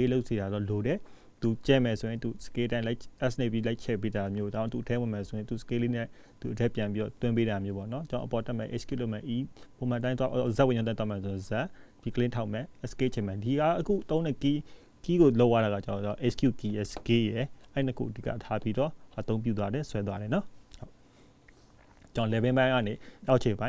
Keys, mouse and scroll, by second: 1.4 ctrl+s, 3.2-4.6 scroll up 1, 14.9 scroll up 2, 16.7-17.4 scroll up 1, 17.4-17.8 scroll up 1, 20.6 middle click, 22.7-23.1 scroll down 1.